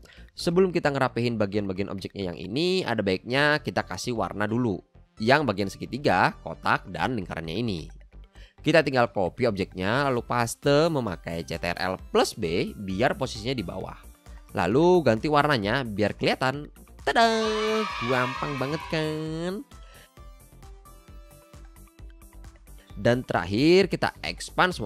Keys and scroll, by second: 13.4 shift+x, 14.9 x, 19.7 v, 20.9 shift+i, 21.8 super+c, 22.3 v.